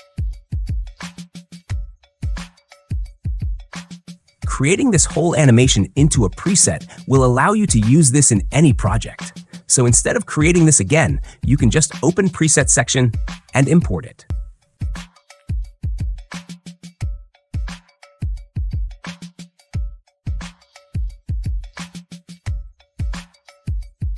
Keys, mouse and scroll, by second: 0.6 click, 2.2 click, 2.7 space, 5.3 space, 7.7 right click, 10.1 click, 12.4-13.4 drag, 13.4-14.5 drag, 15.0-16.0 drag, 21.3-22.9 drag, 23.6-24.1 drag.